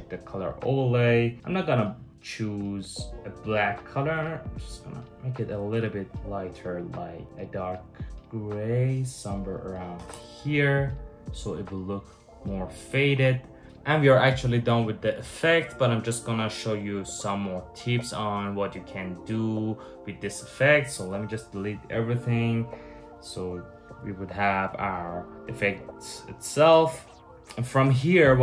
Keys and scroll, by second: 9.6 Return, 9.7 Return, 20.7 shift+super+z, 21.2 shift+super+z.